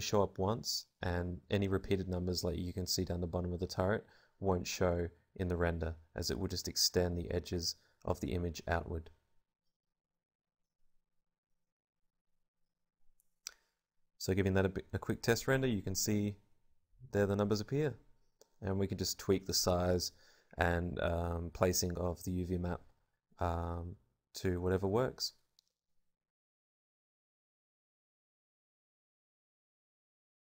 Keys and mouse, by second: 4.3 Tab, 9.7 Tab, 27.3 Escape.